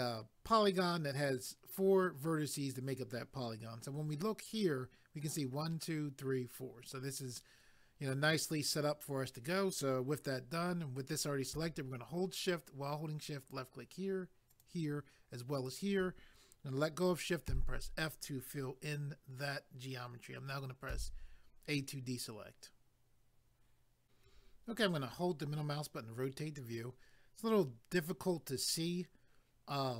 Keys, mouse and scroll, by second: 13.4 shift+click, 14.5 shift+click, 15.6 shift+click, 24.0 click, 24.8 middle click.